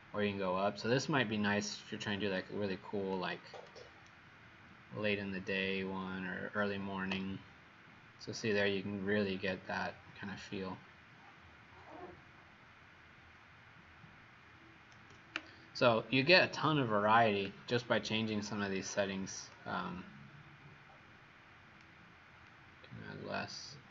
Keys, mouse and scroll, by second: 4.0 shift+right click, 7.0 shift+right click, 19.5 click.